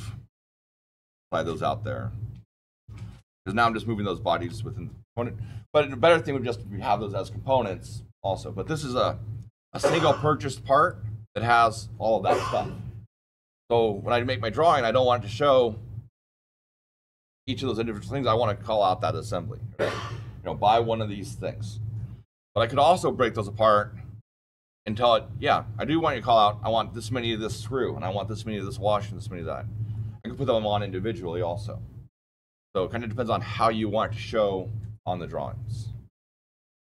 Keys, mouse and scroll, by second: 0.2-2.5 shift+middle click, 3.0 shift+middle click, 3.1-4.3 shift+middle click, 3.9 shift+middle click, 10.7 click, 27.4 click.